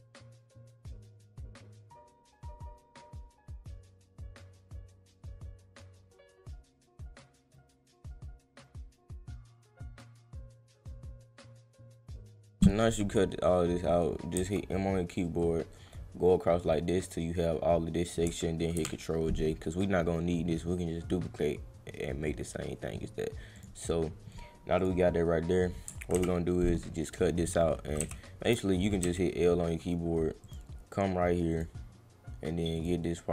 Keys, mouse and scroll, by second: 0.1 click, 0.5 click, 0.9 click, 1.1 click, 1.6 click, 1.7 click, 1.9 ctrl+x, 2.0 click, 2.1 scroll up 2, 2.5 click, 2.6 click, 3.0 click, 3.0 click, 3.1 click, 3.3 click, 3.5 click, 3.9 click, 4.3 click, 4.6 click, 5.0 click, 5.1 click, 5.3 click, 5.4 click, 5.8 click, 5.9 click, 6.0 click, 6.5 click, 6.7 click, 7.1 click, 7.3 click, 7.3 click, 7.6 click, 7.8 click, 7.9 click, 8.0 click, 8.4 click, 8.6 click, 8.8 click, 8.8 click, 9.0 click, 9.2 click, 9.2 click, 9.3 click, 9.6 click, 9.7 click, 9.9 click, 10.0 click, 10.1 click, 11.2 click, 11.4 click, 11.5 click, 11.8 click, 11.8 click, 12.0 click, 12.3 click, 12.3 click, 15.4-18.0 drag, 23.5 click, 24.7 click, 30.4 click, 31.5 click, 32.7 click.